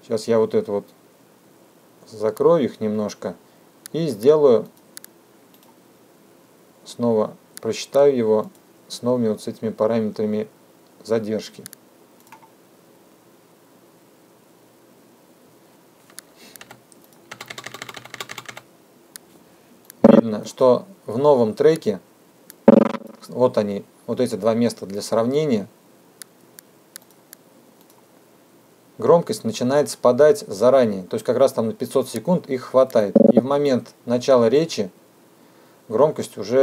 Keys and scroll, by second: 16.8 =.